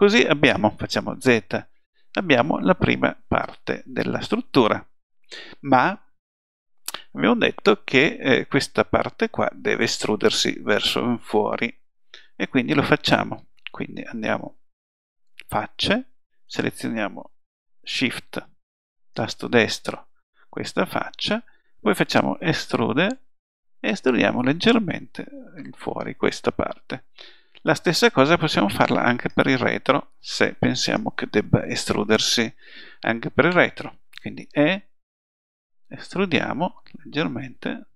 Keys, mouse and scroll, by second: 0.0 click, 0.4 middle click, 1.3 z, 1.9-2.9 middle drag, 3.0 middle click, 20.5 click, 20.6-21.7 middle drag, 21.9 e, 27.0 middle click, 27.4 click, 27.6 middle click, 31.7 middle click, 32.4-34.5 drag, 34.5 e.